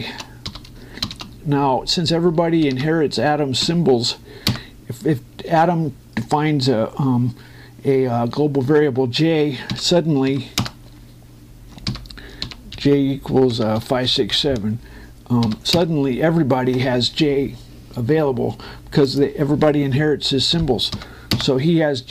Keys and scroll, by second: 5.2 Return, 11.3 Return, 12.7 i, 13.2 #, 14.3 BackSpace, 14.6 5, 14.9 6, 16.4 Return, 21.3 i, 22.0 Return.